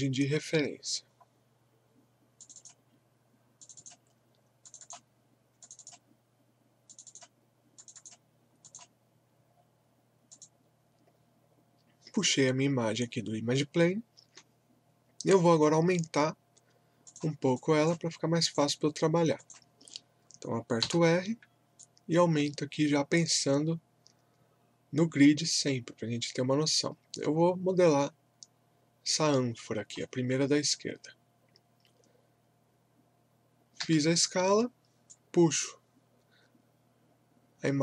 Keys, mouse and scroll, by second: 1.1-1.5 scroll down 1, 2.4 click, 17.1 click, 20.8 r, 21.8-31.8 drag, 33.8 w, 35.1-37.8 drag.